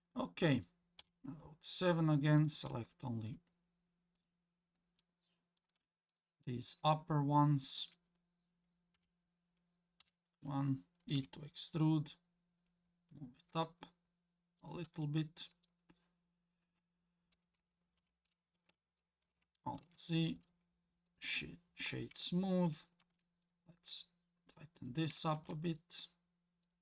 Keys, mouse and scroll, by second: 1.0 KP_7, 2.4 click, 4.2 click, 5.0 middle click, 6.1 shift+click, 6.6 shift+click, 7.6 shift+click, 8.9 KP_7, 10.0 KP_1, 11.2 e, 15.0 middle click, 16.8 Tab, 18.0 Tab, 19.8 alt+z, 20.4 right click, 22.1 Tab, 23.0 ctrl+r, 25.4 ctrl+r.